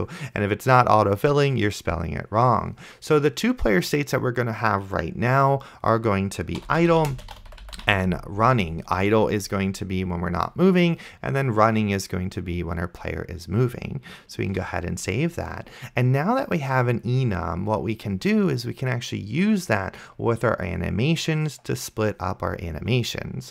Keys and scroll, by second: 6.5-8.5 typing, 14.9 ctrl+s.